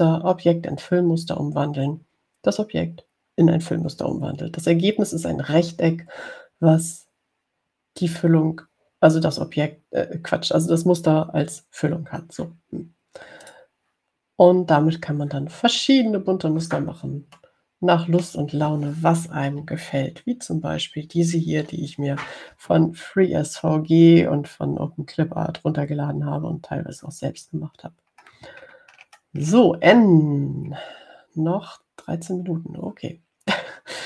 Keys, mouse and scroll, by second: 14.7 click, 18.6-19.7 middle drag, 21.1 ctrl+scroll up 2, 29.4-30.7 scroll down 4, 32.0 scroll up 2.